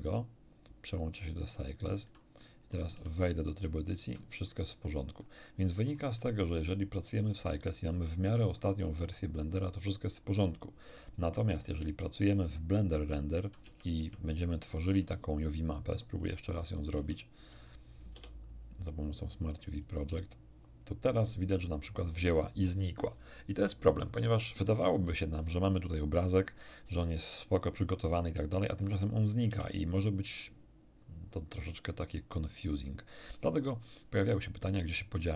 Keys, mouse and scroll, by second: 0.0 click, 1.4 click, 2.4 middle click, 2.9 Tab, 3.9 Tab, 5.2-6.6 middle drag, 11.6 click, 12.2 click, 13.6 Tab, 13.9 Tab, 16.2 click, 16.9 Tab, 18.1 u, 18.8 click, 19.7 click, 29.4 Tab.